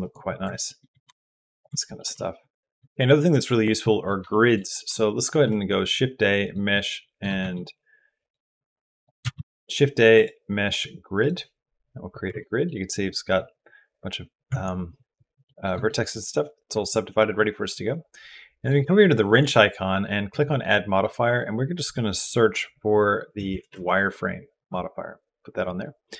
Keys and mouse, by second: 0.4 shift+middle click, 0.8 g, 1.6 shift+click, 4.1 shift+middle click, 5.1 shift+a, 7.2 shift+a, 9.1 shift+a, 12.2 Tab, 12.5 middle click, 14.4 Tab, 15.3 middle click, 15.7 shift+middle click, 20.2-24.5 drag.